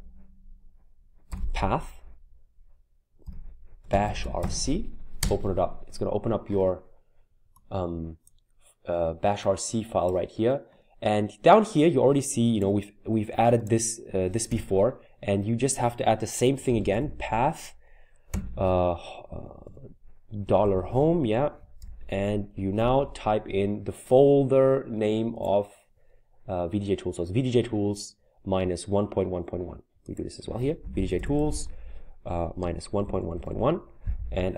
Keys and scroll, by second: 2.9-5.5 typing, 5.2 Return, 14.5 Return, 16.4-18.3 typing, 19.6-21.8 typing, 30.6-33.9 typing.